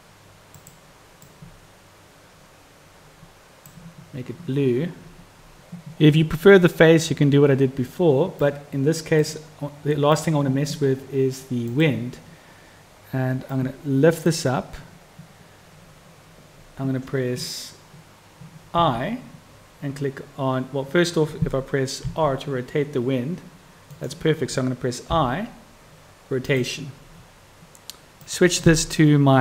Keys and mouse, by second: 10.0-10.4 drag, 13.6-28.0 drag, 28.1-29.4 drag.